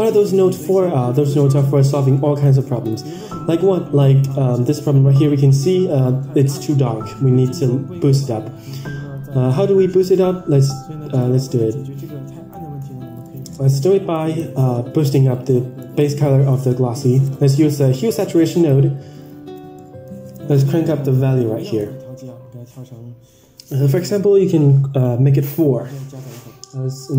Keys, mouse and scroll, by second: 11.1-12.5 drag, 13.2 middle drag, 14.0 click, 14.9 shift+a, 18.4 click, 19.4-19.7 scroll up 6, 19.7 middle click, 21.7-23.9 drag, 25.5 scroll down 4, 26.7 scroll down 2.